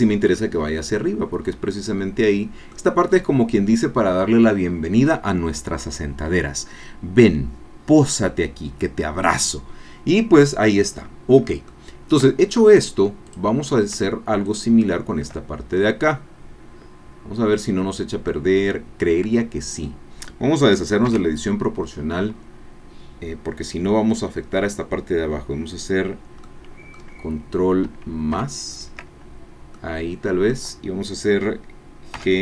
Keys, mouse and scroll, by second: 0.4-2.9 drag, 9.9-11.4 middle drag, 11.7 shift+click, 13.3 click, 14.5 shift+click, 15.8-18.4 drag, 21.1 o, 26.4 click, 28.5 ctrl+KP_Add, 28.5-29.7 ctrl+middle drag, 29.7 click, 32.2 g.